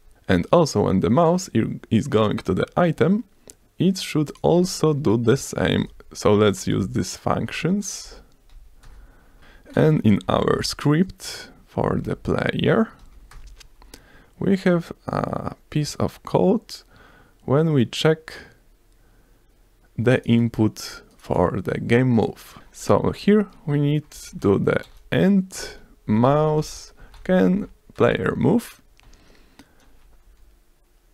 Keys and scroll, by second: 5.8 Return, 5.9 o, 6.0 n, 6.4 shift+-, 6.7 Down, 7.0 Return, 7.2 Down, 7.6 Return, 7.9-8.3 typing, 8.5 Down, 8.9 Return, 9.0 ctrl+s, 9.4 BackSpace, 10.1 ctrl+s, 10.5 ctrl+p, 11.9 p, 13.0 Down, 13.3 Return, 13.7 ctrl+s, 23.0 Left, 23.2-27.0 typing, 27.9 Return, 28.2 ctrl+s, 29.0 s, 30.2 F5.